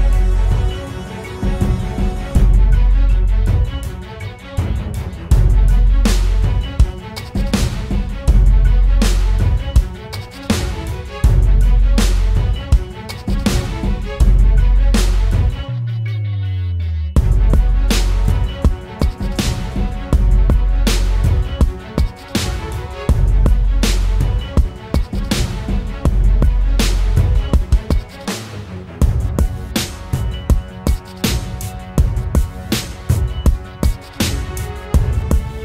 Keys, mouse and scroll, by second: 7.4-8.5 typing, 16.0-16.3 typing, 19.1-19.5 typing, 30.9-31.5 scroll up 1, 31.5 typing.